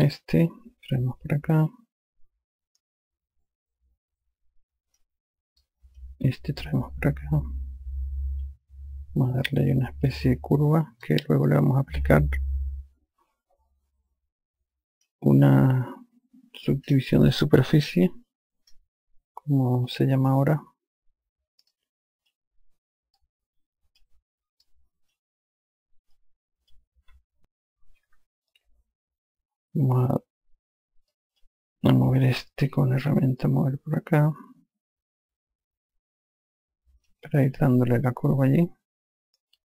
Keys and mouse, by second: 0.0 5, 0.4 click, 6.1 click, 7.3 click, 11.5 click, 22.2 click, 23.6 click, 25.1 click, 26.6 click, 31.6 click, 33.4 e, 33.9 click.